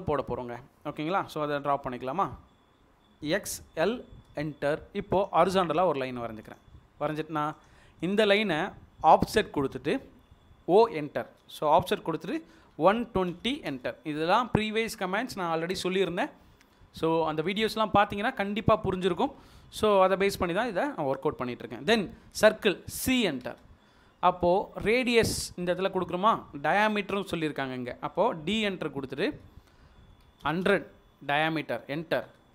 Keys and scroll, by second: 3.4-3.8 typing, 5.0 space, 10.0 o, 12.9-13.3 typing, 13.8 Return, 18.0 Escape, 22.3 c, 23.7 space, 28.5 d, 29.3 Return, 30.3-30.6 typing, 31.4 Return.